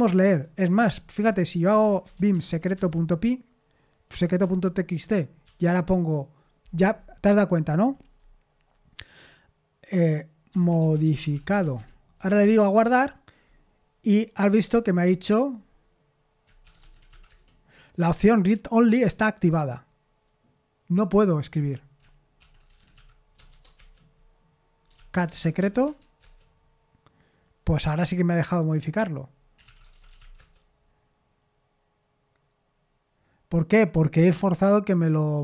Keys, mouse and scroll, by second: 1.4-3.0 typing, 4.2 Return, 5.4 typing, 10.3-12.9 typing, 16.6-17.6 typing, 21.5 Escape, 22.2-26.2 typing, 29.3-30.7 typing.